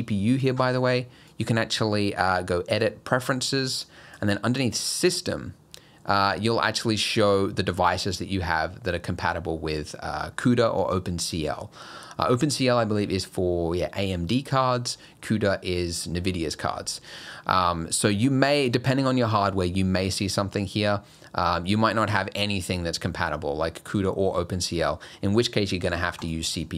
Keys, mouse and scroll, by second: 1.3 click.